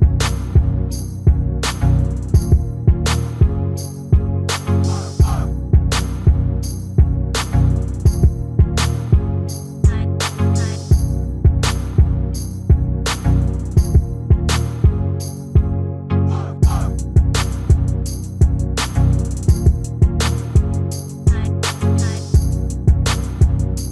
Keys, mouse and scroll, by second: 1.6 middle click, 2.9 right click, 3.7 s, 4.1 a, 4.2 s, 7.8 r, 9.0 middle click, 12.7 s, 14.1 s, 15.3 s, 17.4 s, 18.6 middle click, 19.2 s, 20.1 s, 22.9 click.